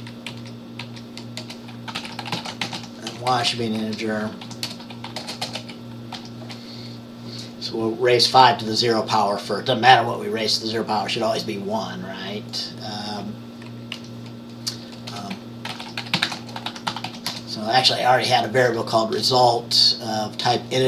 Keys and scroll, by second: 0.0-0.2 typing, 1.5 Return, 1.5-6.2 typing, 15.2 Return, 15.5-17.6 typing.